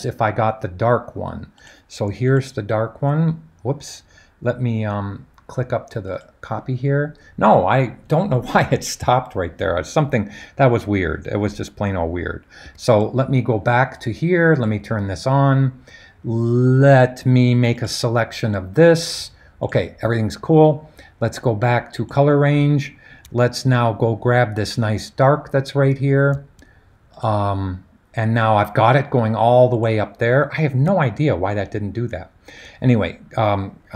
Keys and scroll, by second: 12.6 super+d.